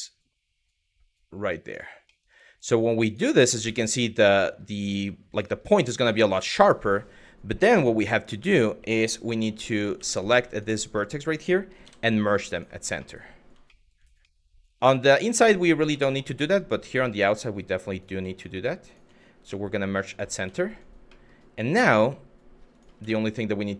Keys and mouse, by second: 1.8 middle click, 2.7 click, 3.3 Tab, 3.6 middle click, 4.9 click, 5.4 Tab, 6.1 shift+middle click, 7.6 1, 9.6 w, 9.8 click, 10.1 shift+click, 10.6 click, 11.5 m, 12.7 middle click, 13.4 middle click, 13.9 middle click, 14.9 middle click, 15.2 shift+middle click, 15.7 shift+middle click, 16.1 middle click, 16.7 shift+middle click, 18.0 shift+click, 18.5 shift+click, 19.0 m, 20.2 middle click, 20.8 middle click, 21.4 1, 22.3 click, 22.7 middle click.